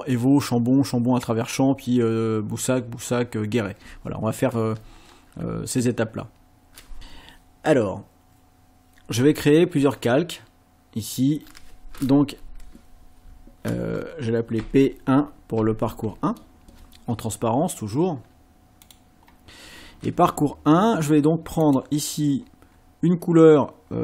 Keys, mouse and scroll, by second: 10.0 click, 14.6 p, 15.6 KP_1, 18.8 click, 21.6 click.